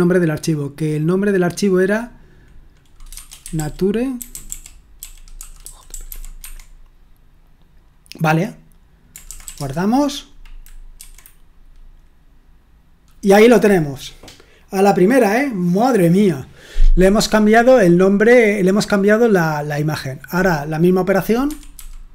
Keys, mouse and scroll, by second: 3.2-6.5 typing, 9.2-9.9 typing, 10.9 F5, 20.3 click, 21.4 Escape, 21.7-22.1 typing.